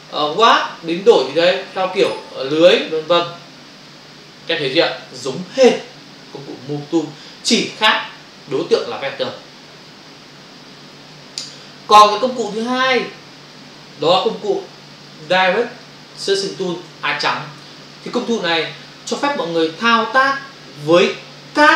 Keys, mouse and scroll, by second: 0.4 click, 2.0 click, 3.1 click, 6.2 Return, 12.4 click, 15.2 b, 15.9 shift+click.